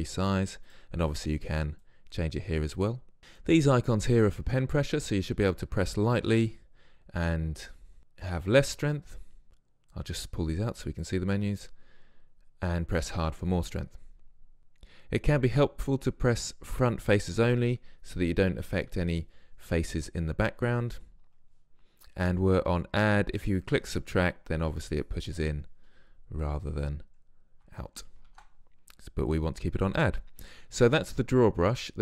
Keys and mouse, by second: 0.8-2.9 drag, 10.0-26.6 drag, 26.6-29.4 middle drag, 28.2 ctrl+z, 29.4-31.2 drag, 31.8-32.0 drag.